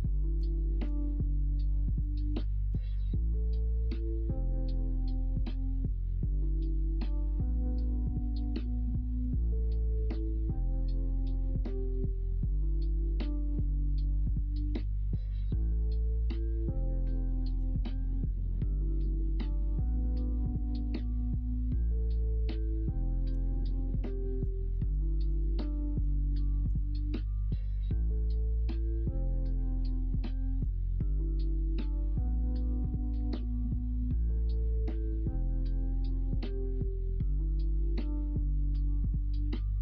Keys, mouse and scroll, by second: 0.7 3, 2.6 s, 5.9 ctrl+z, 6.8-8.3 middle drag, 11.2-11.6 middle drag, 11.9 alt+z, 12.2 middle click, 15.0-16.3 middle drag, 17.5 c, 22.4 ctrl+z, 23.3 c, 25.0 ctrl+z, 25.5 ctrl+z, 25.9 ctrl+z, 26.0 middle drag, 26.6 ctrl+z, 26.9-27.7 middle drag, 27.8-28.3 middle drag, 28.5-29.5 middle drag, 30.5 c, 33.6 click, 34.3 alt+z, 34.5-35.5 middle drag, 35.6 alt+z, 35.9-36.6 middle drag.